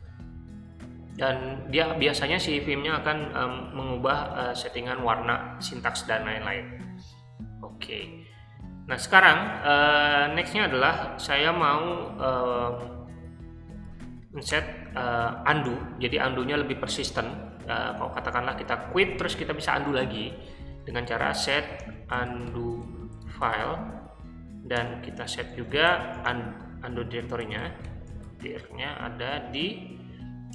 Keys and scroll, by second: 13.7 o, 14.5 Return, 20.9-24.0 typing, 24.7 Return, 25.3-28.9 typing, 30.1 ~.